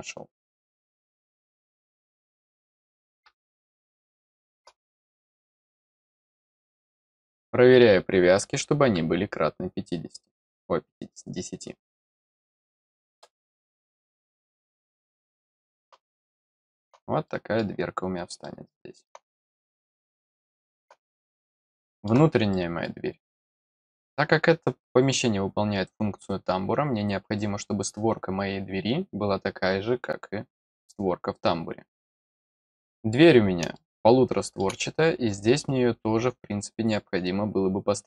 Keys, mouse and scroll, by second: 2.0 click, 4.2 middle click, 5.2 click, 5.8 click, 7.3 click, 15.0 scroll down 1, 15.3 middle click, 16.2 middle click, 17.2 middle click, 18.4 middle click, 20.3 middle click, 21.2 scroll down 1, 21.5 middle click, 22.5 middle click, 23.2 middle click, 33.7 middle click.